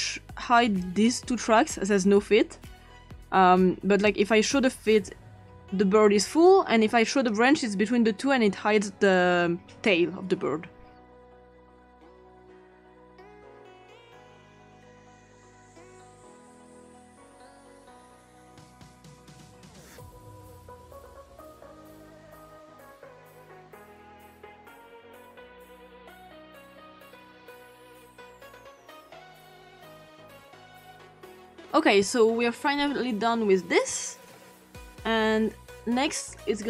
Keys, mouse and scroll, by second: 0.0 click, 0.8 click, 4.1 click, 7.2 click, 11.5 click, 11.8 click, 12.4 click, 12.6 click, 13.0 click, 13.5 click, 14.8 scroll down 2, 15.0 click, 15.7-16.0 ctrl+scroll up 2, 16.0 click, 16.2 click, 16.6 click, 19.6 click, 20.8 click, 21.0 click, 21.5 click, 22.2 click, 22.3 click, 22.7-23.0 ctrl+scroll down 2, 23.1 click, 23.2 ctrl+scroll up 2, 23.7 click, 24.6-25.3 scroll down 3, 25.3-25.7 scroll up 2, 26.1-26.4 scroll down 2, 26.2 click, 26.4 click, 27.2 click, 27.7 click, 28.4 click, 28.8 click, 29.5 click, 30.2 click, 31.0-31.7 ctrl+scroll up 2, 33.1-36.5 ctrl+scroll down 3.